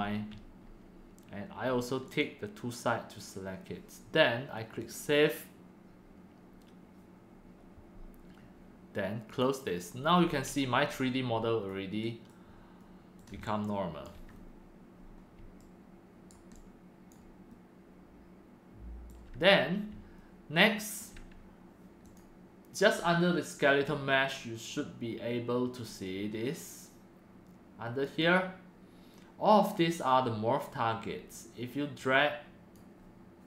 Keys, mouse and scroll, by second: 0.0-0.4 drag, 2.7-3.2 drag, 4.7 click, 8.1 click, 9.2 click, 10.1 scroll up 1, 10.5 middle click, 13.1 click, 14.2 alt+click, 14.3-14.8 scroll up 2, 14.8 click, 15.1 click, 15.8 right click, 16.3-18.9 alt+drag, 17.1 typing, 18.9 alt+right click, 21.0-22.0 alt+drag, 22.1-24.7 drag, 24.7-27.2 right drag, 27.2 click, 28.1-29.0 right drag, 29.0-33.4 drag.